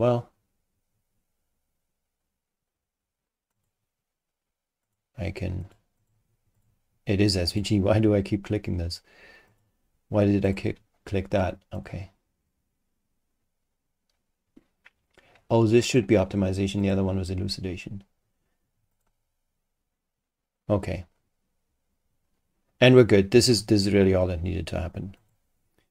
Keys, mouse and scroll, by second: 3.5 click, 4.8 click, 5.6 click, 6.0 click, 6.6 click, 7.5 click, 9.5 click, 10.4 click, 11.8 click, 15.9 click, 16.8 click, 18.9 click, 25.2 click.